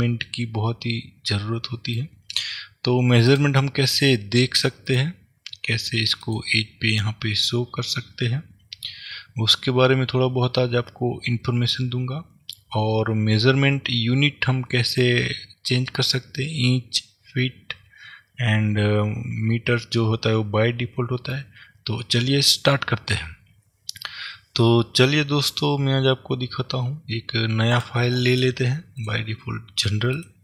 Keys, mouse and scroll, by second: 3.4 click, 5.0 click, 6.4 click, 14.8-27.8 middle drag, 27.8-30.4 drag.